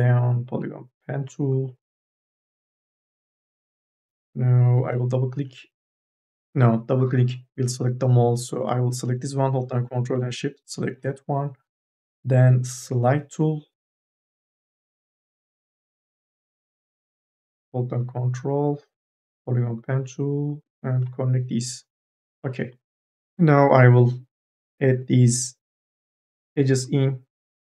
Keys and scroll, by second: 3.8 2, 4.2 e, 18.9 1, 23.0 1.